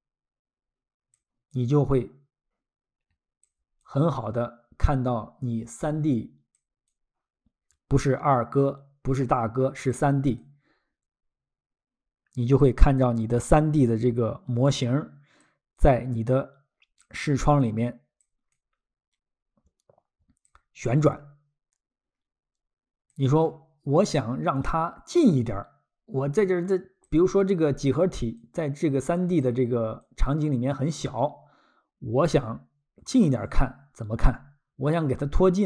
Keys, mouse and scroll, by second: 1.1 ctrl+click, 1.5 ctrl+click, 3.8 ctrl+click, 6.5 ctrl+click, 6.9 ctrl+click, 9.9 ctrl+click, 10.4 ctrl+click, 12.6 ctrl+click, 13.0 ctrl+click, 15.4 ctrl+click, 15.8 ctrl+click, 17.6 ctrl+click, 18.5 ctrl+click, 20.5 ctrl+click, 20.8 ctrl+click, 23.1 ctrl+click, 23.5-24.1 ctrl+scroll, 25.2 ctrl+click, 27.1 ctrl+click, 28.4 click, 30.0 ctrl+click.